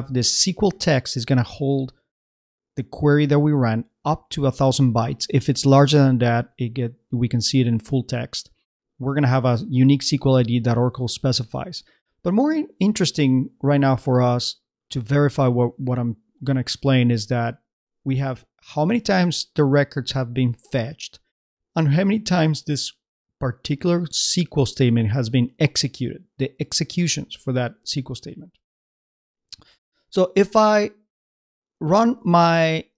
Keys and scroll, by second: 32.4 super+Tab.